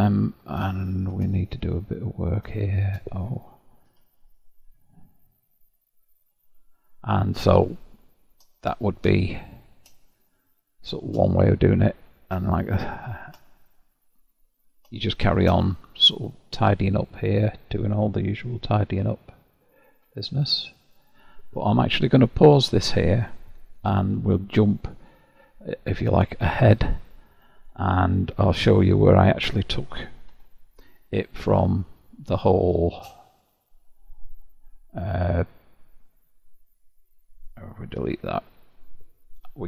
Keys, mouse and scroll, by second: 0.1-0.7 scroll up 1, 0.7 shift+middle click, 1.5-2.3 scroll up 3, 2.3 click, 2.7 shift+click, 4.0 0, 5.4-7.8 middle drag, 7.8 scroll down 5, 8.5 scroll down 1, 8.5 shift+middle click, 9.2-9.8 scroll down 1, 9.8 scroll down 1, 10.0-12.1 shift+middle drag, 12.1-12.6 scroll down 1, 12.6-15.7 shift+middle drag, 15.7-16.7 scroll up 3, 16.7-17.4 scroll up 1, 17.4 click, 18.6 g, 20.1 g, 21.7-24.9 middle drag, 26.3-27.0 scroll up 4, 27.0-28.9 shift+middle drag, 28.9-30.4 scroll down 9, 30.4 Tab, 31.9 click, 33.3 click, 36.1-36.7 drag, 36.7-38.1 scroll down 1, 38.1 h, 38.7 click, 39.4 KP_Decimal.